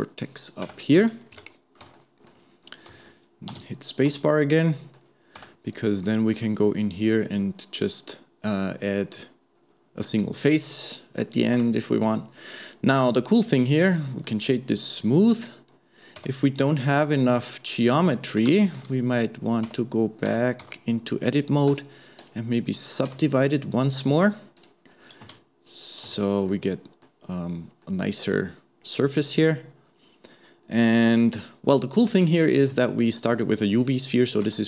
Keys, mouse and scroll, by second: 1.3 KP_1, 2.0-3.5 shift+middle drag, 3.5 space, 4.1 space, 4.4-5.4 middle drag, 5.4 Tab, 5.7-6.2 scroll up 1, 6.2-9.0 shift+middle drag, 9.0-10.5 scroll down 1, 10.5-11.6 middle drag, 11.6 Tab, 11.9-12.4 scroll down 1, 12.4-13.4 scroll up 2, 13.4 right click, 14.2-16.2 middle drag, 16.2 Tab, 18.6 shift+Left, 19.7 Tab, 20.3 Tab, 20.6 a, 21.7-24.6 right drag, 24.6 click, 25.2 space, 26.1 space, 26.5-30.8 middle drag, 34.5 Tab.